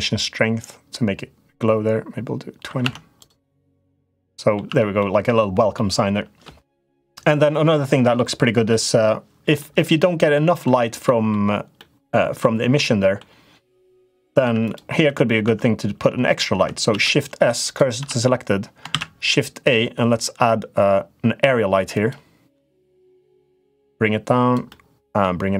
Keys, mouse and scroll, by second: 2.6 Tab, 3.0 click, 3.6 click, 4.0 middle click, 4.4 Tab, 4.7 middle click, 5.5 middle click, 7.4 middle click, 8.4 middle click, 10.1 middle click, 10.8 middle click, 11.5 middle click, 12.5 middle click, 14.2 Tab, 14.4 click, 14.8 Tab, 15.2 Tab, 16.6 shift+s, 17.7 Tab, 18.7 shift+a, 22.3 middle click, 23.5 click, 24.6 middle click.